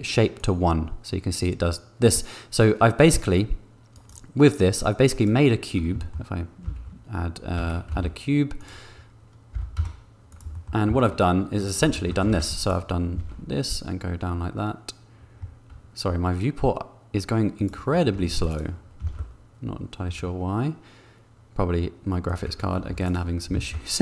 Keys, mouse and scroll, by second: 0.4 click, 1.4-4.2 middle drag, 4.5 middle click, 6.0 shift+middle click, 6.6 shift+s, 7.9 shift+a, 9.5 g, 10.0 z, 10.3 click, 10.5 shift+middle click, 11.2 Tab, 11.9 shift+middle click, 12.4 ctrl+r, 13.5 ctrl+b, 18.1 ctrl+r, 19.3 ctrl+b, 22.7 ctrl+r, 23.8 ctrl+b.